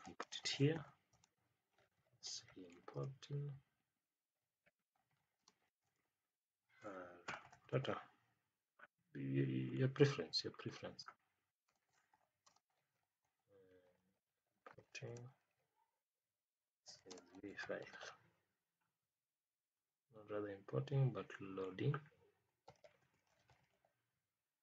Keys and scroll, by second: 0.2 space, 1.1 space, 2.9 space, 5.3 space, 11.6 space, 12.4 space, 15.0 space, 17.0 space.